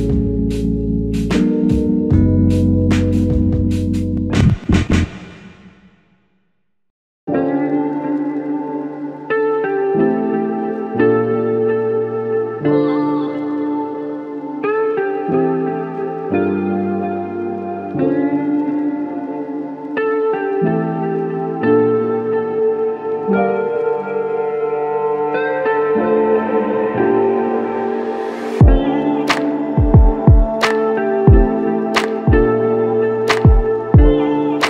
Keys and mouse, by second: 1.0 ctrl+click, 7.7 ctrl+click, 8.6 ctrl+click, 11.6 double click, 18.7 shift+click, 21.9 shift+click, 28.9 typing, 30.6 alt+click, 33.5 alt+click.